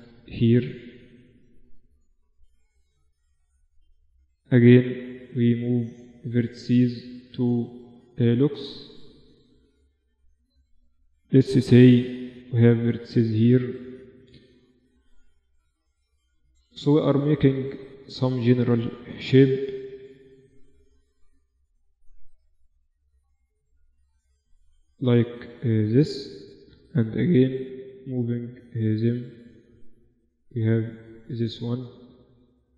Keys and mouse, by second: 0.9 click, 2.8 click, 3.2-4.2 right drag, 4.2-6.2 middle drag, 6.2 right click, 9.8-11.7 middle drag, 11.3 g, 11.7 right click, 12.8 g, 13.9 g, 16.5-18.0 middle drag, 18.8 g, 20.0 g, 21.2 g, 22.8 g, 23.7 g, 24.8 right click, 25.6 right click, 26.6 g, 29.0-30.3 right drag, 30.3-32.0 middle drag.